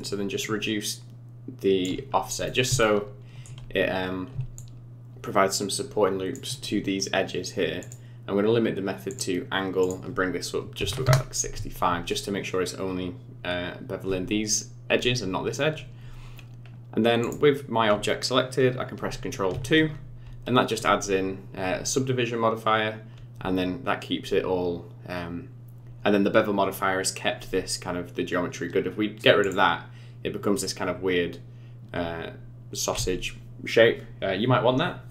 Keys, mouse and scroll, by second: 2.1 scroll up 5, 2.4 middle click, 2.8 shift+middle click, 4.6 shift+click, 7.8 click, 9.8 click, 16.0 scroll down 5, 16.6 scroll up 3, 17.2 click, 19.6 ctrl+2, 29.4 click, 30.6 middle click.